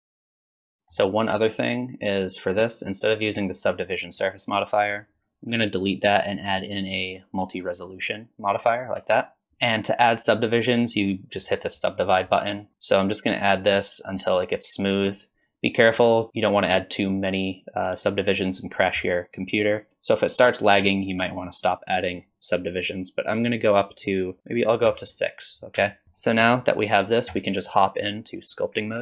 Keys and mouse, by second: 0.0-0.7 typing, 0.0 click, 0.0 ctrl+z, 0.8 click, 5.0 drag, 5.9-7.4 drag, 9.5 ctrl+s, 12.1 click, 13.5-15.8 drag, 23.4 click, 25.9 shift+middle click.